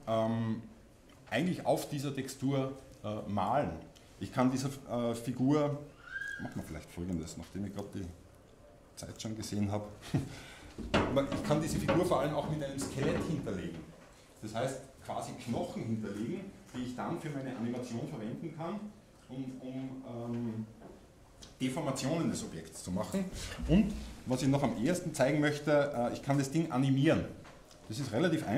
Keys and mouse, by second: 28.0-28.5 drag.